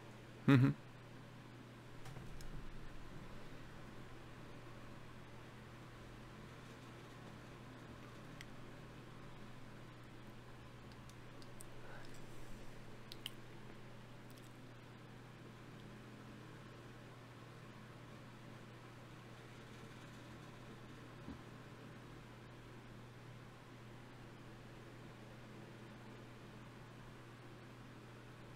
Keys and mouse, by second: 3.2 KP_Divide, 9.2-11.2 drag, 11.2 KP_Divide, 14.6 n, 16.0-26.3 middle drag, 26.9-28.5 right drag.